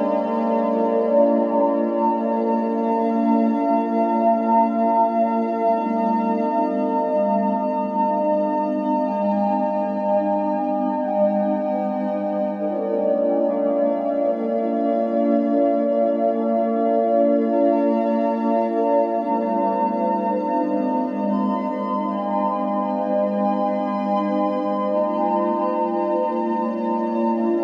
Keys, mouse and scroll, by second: 0.3 click, 0.8 Tab, 1.1 a, 1.5 e, 2.2 s, 4.2-4.7 scroll up 1, 4.7 click, 4.8 g, 5.7 click, 5.9 g, 6.6 click, 6.7 g, 7.4 ctrl+z, 7.6 ctrl+z, 7.9 ctrl+z, 8.2 ctrl+scroll up 1, 8.5 ctrl+z, 9.0 e, 9.3 s, 11.0 g, 11.7 ctrl+z, 12.0 ctrl+z, 13.0 click, 13.9 e, 14.2 s, 15.7 click, 15.9 g, 16.6 click, 16.8 g, 17.6 click, 17.8 g, 19.4-22.0 typing, 19.8 click, 21.5 click, 22.6 ctrl+b, 23.2 r, 23.7 g, 24.2 click, 24.4 b, 24.7 g, 25.2 ctrl+b, 26.8 click, 27.0-27.6 typing.